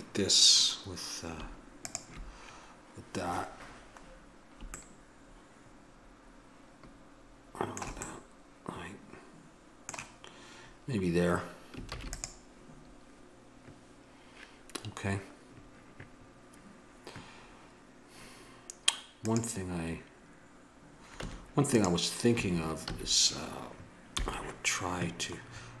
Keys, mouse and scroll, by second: 1.8-4.6 middle drag, 4.9-7.5 middle drag, 8.0 middle click, 8.1 scroll up 1, 8.2-10.0 middle drag, 11.8 ctrl+s, 21.1 Tab, 22.2 a, 22.8 a, 24.0 t.